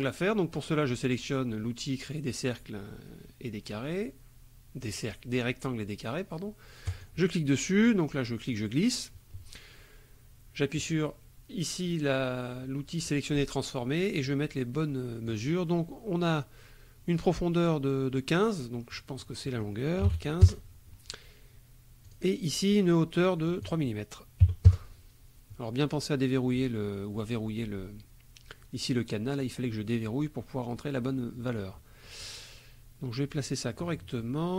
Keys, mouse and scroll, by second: 6.9 click, 7.8 click, 10.8 click, 15.3 click, 18.9 click, 20.0 KP_5, 20.4 KP_Enter, 22.0 click, 23.5 click, 24.4 KP_3, 24.6 KP_Enter, 32.2 click, 33.3-34.5 drag.